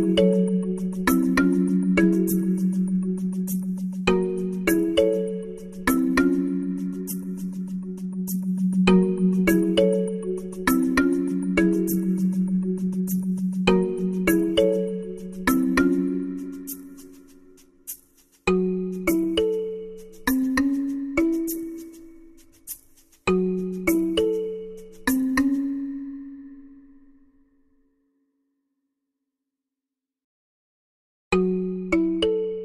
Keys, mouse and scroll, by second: 0.5-7.4 drag.